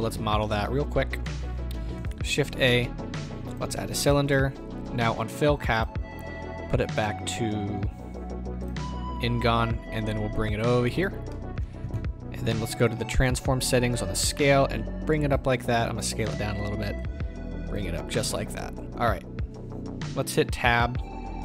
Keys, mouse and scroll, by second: 0.1 scroll down 2, 0.4-1.9 middle drag, 0.7-1.2 scroll down 2, 1.6-1.9 scroll up 2, 1.9 Delete, 1.9 drag, 2.1 shift+a, 4.2 click, 5.7-11.3 drag, 12.8 click, 14.2 click, 16.2 click, 18.2-18.8 drag, 18.9-19.8 scroll down 2, 19.9 Tab, 20.3-21.4 right drag.